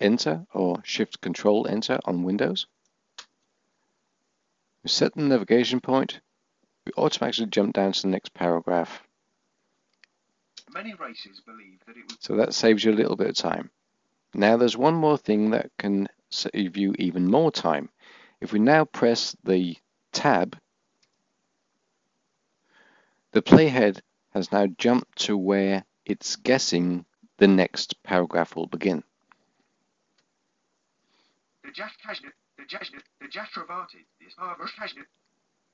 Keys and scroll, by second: 1.1 ctrl+shift+Return, 17.7 Tab.